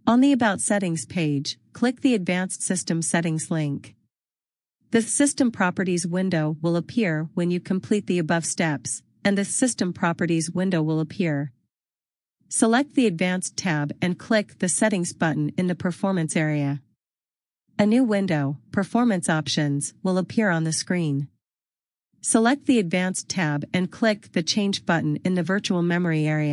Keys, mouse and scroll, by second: 2.3 scroll, 6.4-7.4 scroll, 10.7 click, 11.4 click.